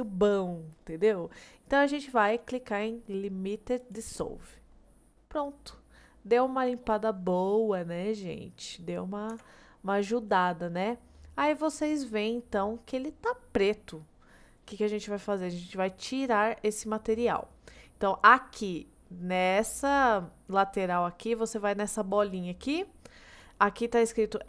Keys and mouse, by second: 4.8-7.9 middle drag, 8.6 middle click, 9.4 Tab, 9.8-14.4 middle drag.